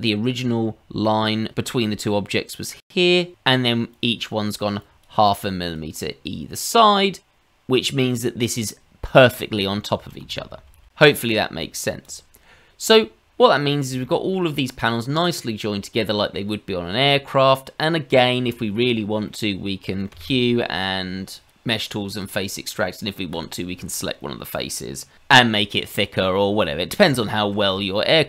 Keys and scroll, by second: 10.0 ctrl+z, 10.2 ctrl+z, 10.6 ctrl+z, 10.8 ctrl+z, 20.1 q.